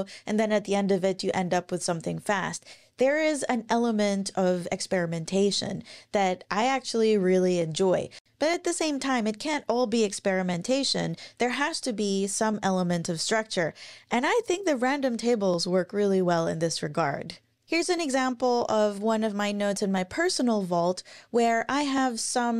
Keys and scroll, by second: 18.7 super+=.